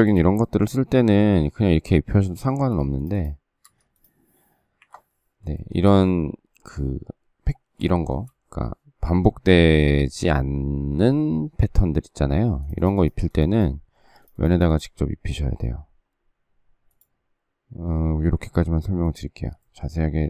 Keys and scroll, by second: 1.4 space, 2.3 space, 2.6 Escape, 3.6 Escape, 4.7 Delete.